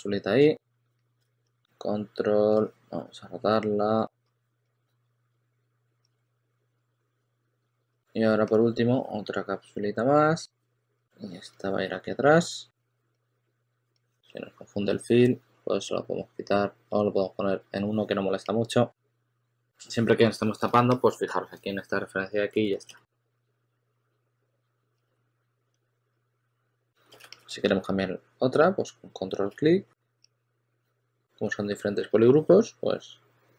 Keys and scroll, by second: 0.6 e, 1.1 super+z, 4.7-5.8 typing, 7.1 w, 7.5 q, 10.7 e, 11.1 w, 19.5 w, 20.7 shift+super+a, 21.2 shift+super+a, 22.5 shift+super+x, 23.2 w, 24.8-27.5 typing, 29.4 shift+f, 29.9 shift+f, 30.7 w.